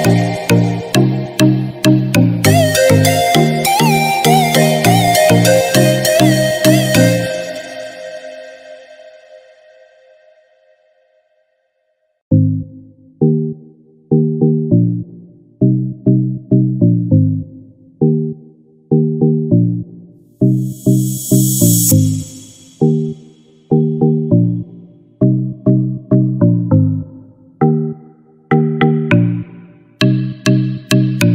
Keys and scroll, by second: 9.9 ctrl+d, 10.8 ctrl+=, 26.9 ctrl+z.